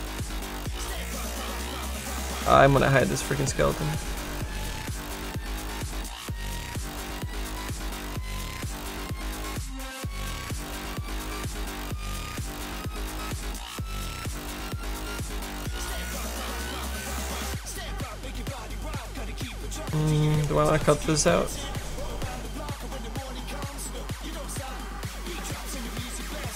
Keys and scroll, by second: 12.3 s.